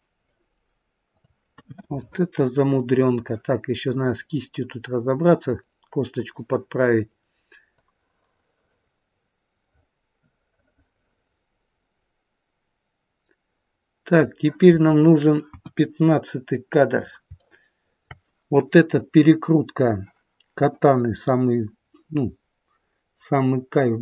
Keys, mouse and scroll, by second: 0.9 click, 1.9 middle click, 3.4-3.9 scroll up 1, 3.9 middle click, 3.9-4.9 scroll down 1, 6.5-7.3 scroll down 2, 7.7 click, 15.4 KP_1, 15.9-16.9 scroll up 1, 16.9 scroll down 1, 17.0 scroll down 1, 17.3 shift+middle click.